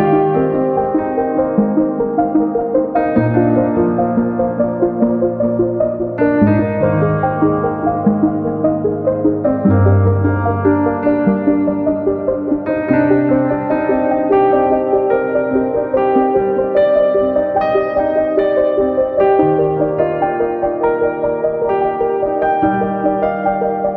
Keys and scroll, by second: 11.4-12.4 typing, 13.5-14.5 typing, 15.9-16.6 typing.